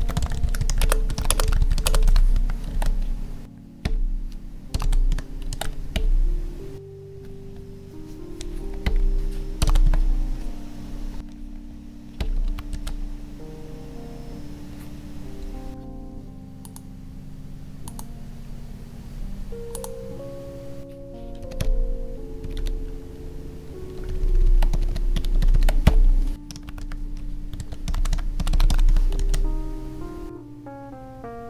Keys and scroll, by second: 0.8 space, 1.2 space, 1.8 space, 2.7 ctrl+s, 5.1 Tab, 5.5 ctrl+s, 9.8 Tab, 12.4 ctrl+v, 12.7 ctrl+s, 21.5 Down, 24.0 ctrl+Down, 24.7 Down, 25.4 ctrl+Right, 28.9 Tab, 29.2 ctrl+s.